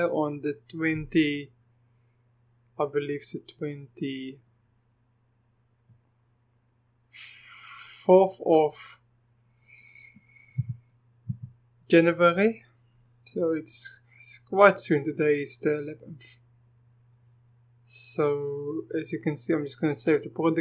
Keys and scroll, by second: 10.6-11.3 typing.